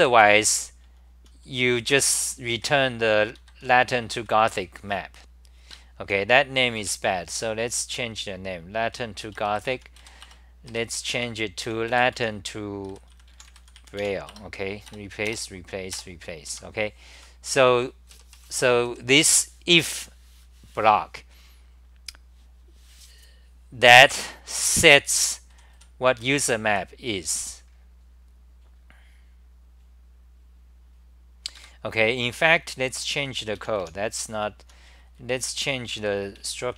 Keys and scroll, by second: 0.0 ctrl+g, 0.0-4.9 typing, 3.4 ctrl+g, 6.8 j, 7.1 d, 8.5-12.6 typing, 9.7 End, 10.6 Return, 10.6 Up, 11.1 Home, 14.4 Return, 16.5 Home, 16.9-19.8 typing, 24.5 ctrl+g, 24.8-27.2 typing, 32.6 ctrl+g, 32.6-36.7 typing.